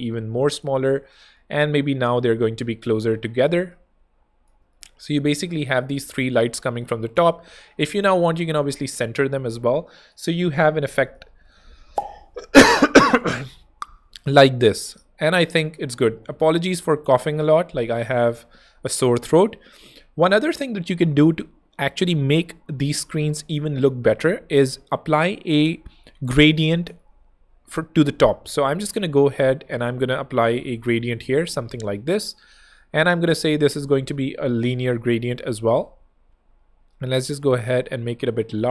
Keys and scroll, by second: 0.3 shift+space, 1.3 shift+space, 7.5 shift+super+g, 8.0 alt+super+h, 8.6 alt+h, 16.6 shift+super+], 17.6 super+Escape, 26.2 o, 28.3 super+x, 30.0 super+v, 35.8 Escape.